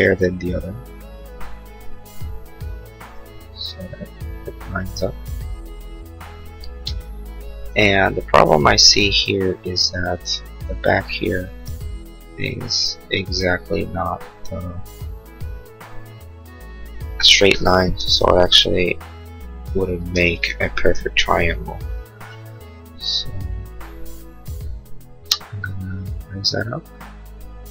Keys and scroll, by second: 18.2 l, 20.1 space, 21.2 l.